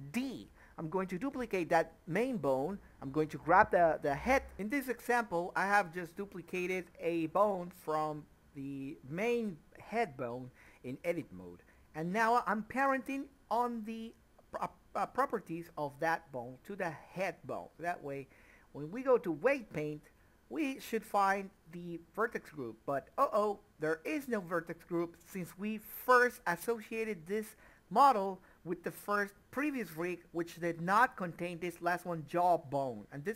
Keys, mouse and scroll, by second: 0.6 click, 2.2 g, 3.8 click, 4.9 g, 5.8 click, 8.5 BackSpace, 10.5 Return, 12.9 click, 14.9 middle click, 16.0 Tab, 16.7 click, 18.2 Tab, 22.4 click, 24.7 Tab, 25.9 click, 26.4 shift+click, 27.5 ctrl+p.